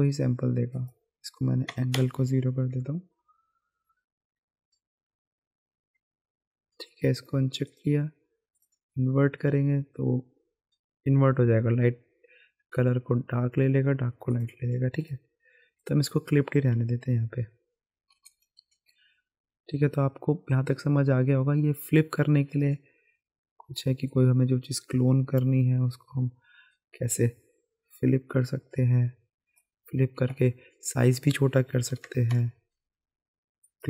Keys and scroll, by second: 1.7 KP_0, 1.9 Return, 18.1-19.1 typing, 31.9 KP_1, 32.0 KP_0.